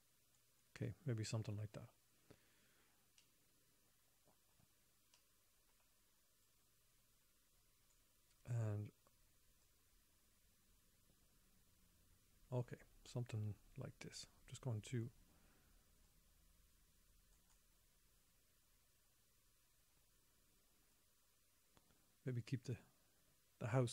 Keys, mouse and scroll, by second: 3.0-3.6 scroll down 1, 3.6 middle click, 3.6 scroll down 1, 4.2 middle click, 5.5 middle click, 6.8 click, 10.0 click, 16.4 click, 21.3 click.